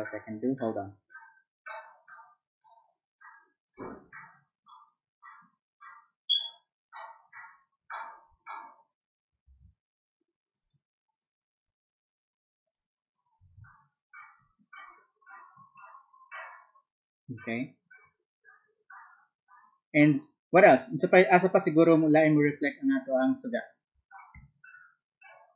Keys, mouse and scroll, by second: 2.8 alt+click, 3.7-4.8 alt+drag, 7.0-8.0 alt+drag, 9.5 ctrl+z, 10.5 ctrl+click, 10.7 ctrl+click, 12.7 ctrl+click, 20.1 ctrl+click, 21.1-22.5 ctrl+drag.